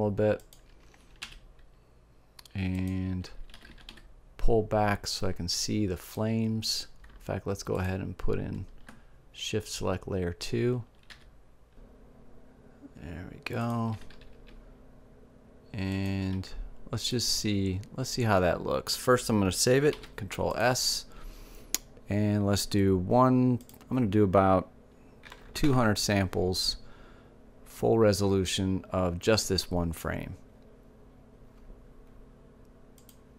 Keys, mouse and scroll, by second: 0.5-2.1 drag, 1.2 r, 2.8-4.8 drag, 3.5 g, 6.1-9.3 drag, 11.9 g, 14.1-15.7 drag, 14.3 g, 16.4-19.3 drag, 16.7 g, 20.3 ctrl+s, 23.9-25.8 drag, 25.8 KP_0, 33.3 click.